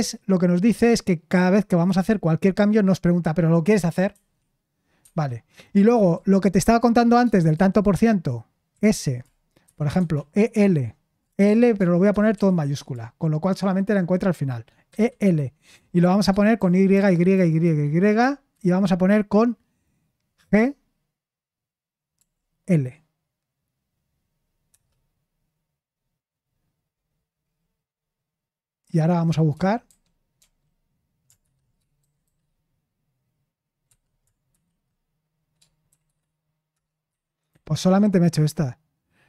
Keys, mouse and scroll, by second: 4.1 Escape, 5.0 Escape, 7.5 shift+5, 8.7-12.8 typing, 14.9 typing, 16.5-18.5 typing, 20.4 g, 22.1 l, 24.7 Return, 29.5-30.4 typing, 31.4-32.2 typing, 33.8 Escape, 34.5 /, 35.9 typing, 36.7 Return, 37.1-38.2 typing.